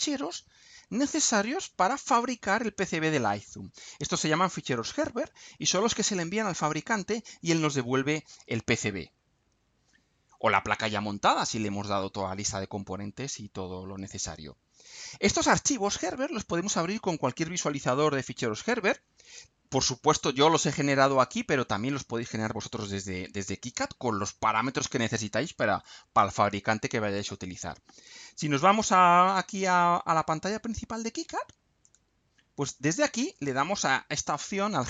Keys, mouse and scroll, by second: 28.8 click, 30.4 click, 32.0 click.